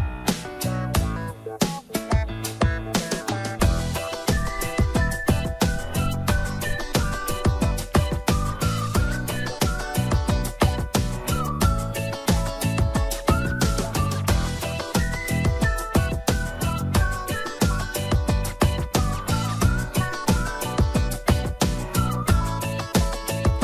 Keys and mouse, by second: 0.9 click, 2.3 click, 3.4 click, 3.9 click, 5.3 shift+middle click, 6.3 shift+middle click, 9.6 shift+middle click, 11.2 click, 12.1 click, 13.8-15.6 drag, 16.7-17.8 drag, 18.1 shift+middle click, 19.8 shift+middle click.